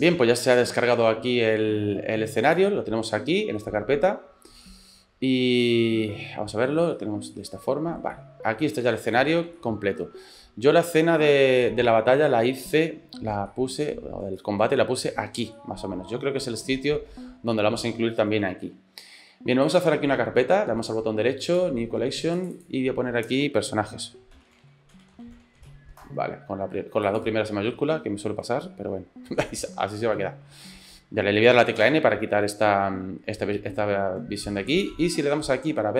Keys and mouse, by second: 2.5 click, 4.9 click, 6.1 click, 7.0 shift+click, 7.3 shift+click, 8.2 click, 8.3 middle click, 9.1 shift+middle click, 9.6 click, 9.9 middle click, 10.9 click, 11.1 middle click, 13.5 shift+middle click, 13.8 middle click, 14.4 shift+middle click, 15.6-18.4 middle drag, 19.7-21.4 right drag, 21.4 click, 22.4 click, 22.6-26.5 drag, 27.1 click, 28.7 shift+middle click, 31.8 n, 34.8 click.